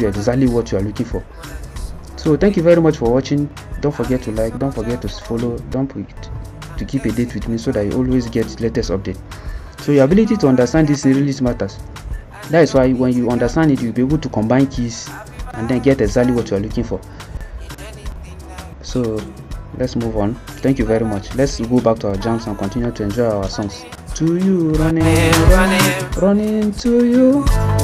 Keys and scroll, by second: 24.6 ctrl+c, 25.7 ctrl+c, 27.2 ctrl+c.